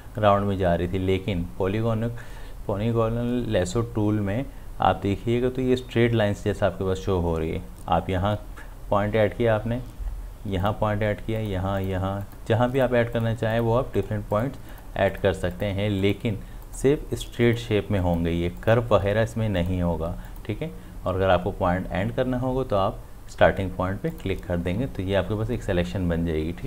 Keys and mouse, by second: 10.6 click, 24.1 click.